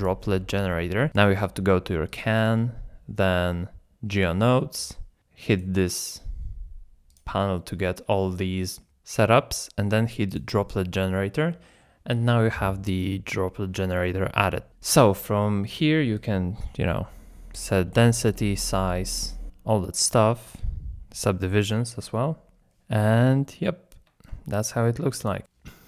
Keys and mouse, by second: 2.4-4.3 drag, 5.2 click, 7.2-10.4 drag, 16.2-17.7 shift+drag, 18.4-19.8 shift+drag, 20.1 shift+click, 21.7 z, 22.6 z, 24.3 shift+click.